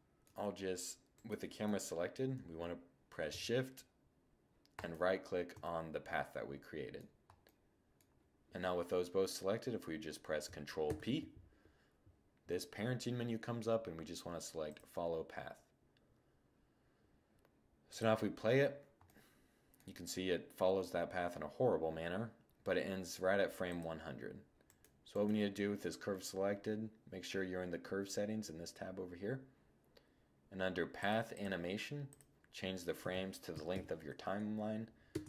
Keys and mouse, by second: 0.5 middle click, 5.4-7.8 middle drag, 10.2 ctrl+p, 17.2-18.4 drag, 18.4-18.7 middle drag, 18.7 click, 20.0 middle click, 23.0-24.0 drag, 24.0-25.0 middle drag, 25.0-26.3 right drag, 30.2-33.2 drag, 33.2 middle click.